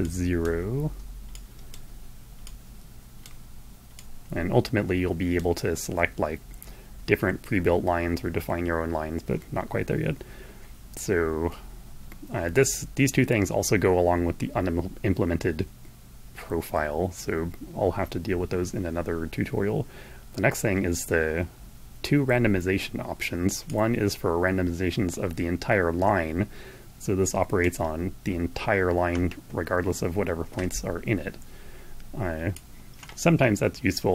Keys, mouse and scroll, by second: 1.0 click, 2.0-3.1 drag, 3.6-5.2 drag, 22.8-27.4 drag, 32.0-34.1 drag.